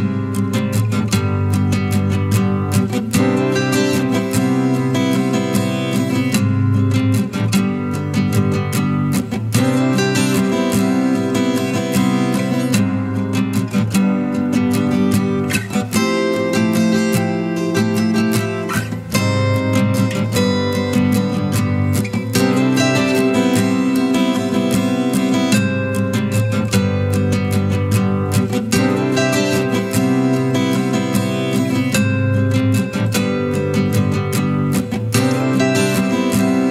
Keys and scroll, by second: 33.5 shift+F8, 34.0 shift+F7.